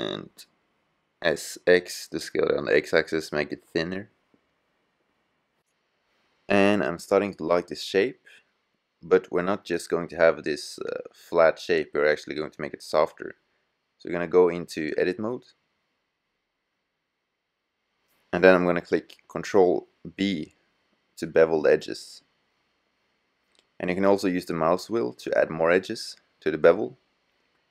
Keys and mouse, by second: 3.2-4.1 middle drag, 5.1-8.3 middle drag, 17.3 click, 20.1 ctrl+b.